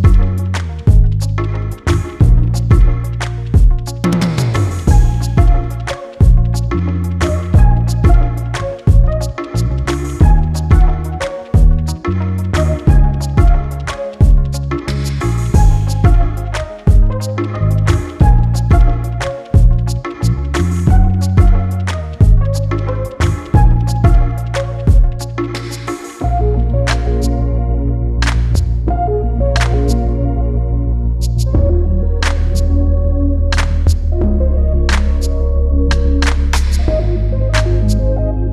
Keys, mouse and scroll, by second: 0.7 click, 2.0-2.9 scroll down 25, 3.1-3.5 scroll up 9, 3.7-5.4 scroll down 3, 5.4-12.2 drag, 12.2 x, 24.1-27.8 drag, 27.8 scroll up 7, 28.4-30.0 right drag, 30.0-30.8 scroll up 9, 30.8-31.2 scroll up 13, 31.5-36.1 scroll down 14, 36.1-38.5 drag.